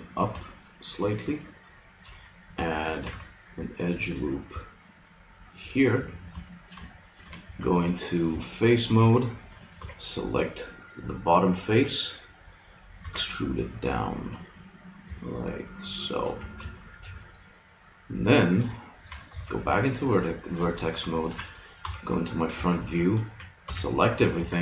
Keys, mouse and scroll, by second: 1.7-3.1 middle drag, 3.1 ctrl+r, 3.3 click, 5.9 a, 6.5 middle click, 7.5 ctrl+Tab, 9.7 b, 10.4 click, 13.0 e, 16.3 click, 16.4 a, 19.3 ctrl+Tab, 21.9 KP_1, 23.7 a.